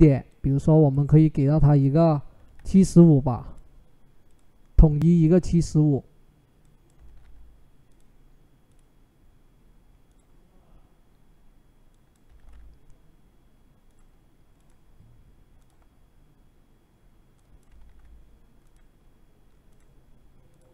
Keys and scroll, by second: 2.0-2.9 typing, 6.8 typing, 12.1 typing, 17.5 typing.